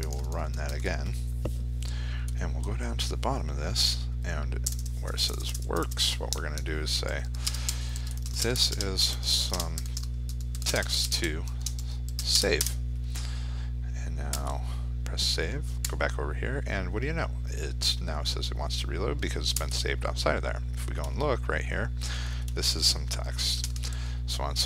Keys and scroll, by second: 0.2 ctrl+r.